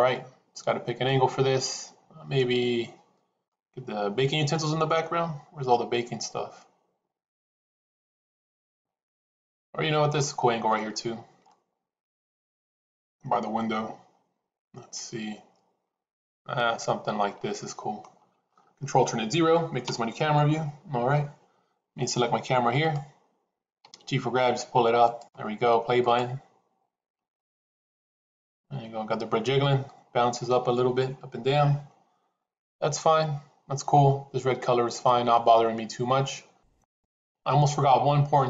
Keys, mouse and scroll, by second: 0.0-1.0 middle drag, 3.4-10.1 middle drag, 11.4-17.9 middle drag, 19.8 ctrl+alt+KP_0, 22.6 click, 23.8 g, 25.9 click.